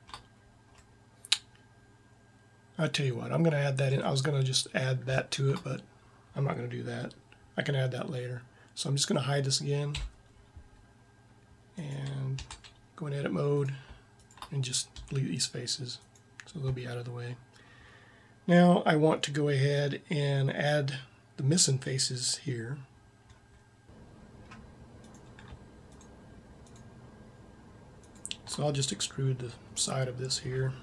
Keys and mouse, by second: 0.7 middle click, 1.5-2.7 middle drag, 5.0 middle click, 5.2 middle click, 9.9 h, 12.3 Tab, 15.0 x, 17.3 middle click, 18.5 middle click, 19.7 middle click, 23.8-24.9 middle drag, 24.9 right click, 28.7-29.9 middle drag.